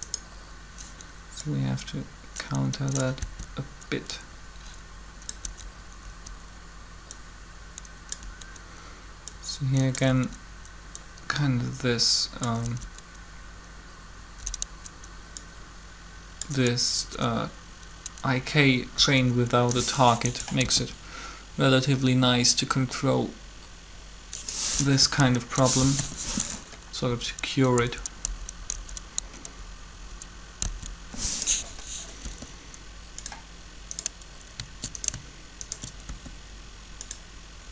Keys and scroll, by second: 3.0 Down, 5.4 Up, 5.8 Up, 8.2 Up, 10.0 Up, 12.4 Up, 14.4 Up, 16.8 Up, 18.9 Up, 20.6 alt+a, 24.7 Up, 25.9 7, 27.1 Up, 30.6 Down, 32.2 r, 36.1 shift+r, 37.6-37.7 typing.